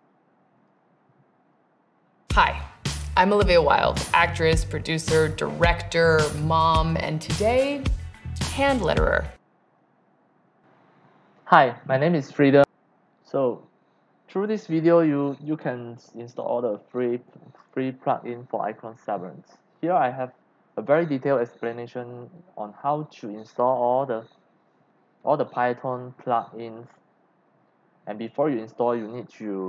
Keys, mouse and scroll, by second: 0.6 click, 2.7 scroll down 1, 4.5 scroll down 1, 5.6 scroll up 1, 8.6 click, 9.7-10.0 scroll down 1, 10.5-10.9 scroll up 2, 11.8 click, 13.0 scroll down 1, 13.6 scroll down 1, 19.7 scroll up 1.